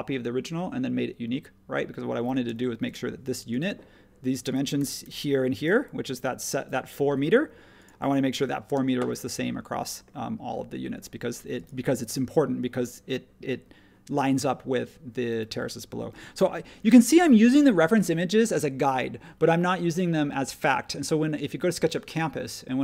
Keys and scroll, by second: 2.4 space, 4.8 typing, 7.0 Escape, 7.0 typing, 8.7 space, 16.1 super+1.